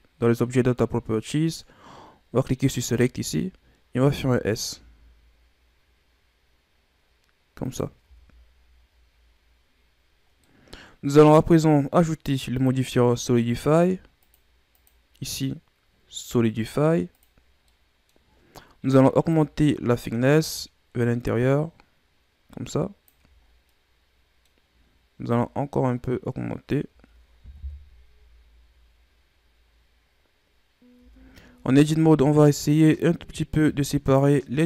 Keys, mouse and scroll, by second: 2.8-3.9 drag, 3.9 s, 8.0 Tab, 10.2 scroll down 3, 10.4-11.2 middle drag, 11.2-12.5 scroll up 1, 12.5 click, 13.6-17.7 drag, 17.7-18.2 middle drag, 18.2-19.1 scroll up 1, 19.3-22.3 drag, 23.4 scroll down 2, 23.7-25.3 middle drag, 25.3-27.5 shift+drag, 27.5 KP_1, 29.8-31.0 scroll up 5, 31.0 Tab, 32.0 right click, 33.5 right click.